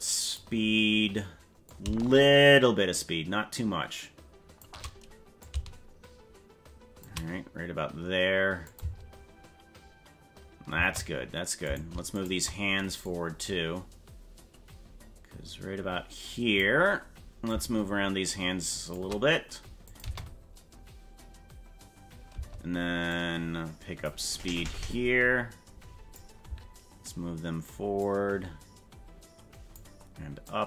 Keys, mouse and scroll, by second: 1.6-4.6 shift+drag, 5.4-7.0 shift+drag, 8.6 click, 8.8 space, 10.7 space, 11.8 right click, 12.2 shift+right click, 13.1-16.6 drag, 17.4-18.9 shift+drag, 19.8 click, 20.0 space, 22.3 space, 23.1-26.1 drag, 28.0-29.7 drag, 30.4-30.6 drag.